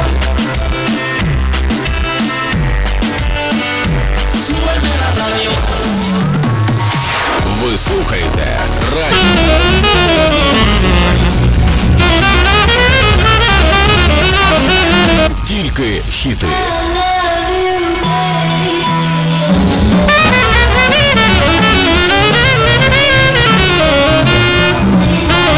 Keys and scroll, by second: 1.1 Down, 1.9 Return, 15.3 Page_Down.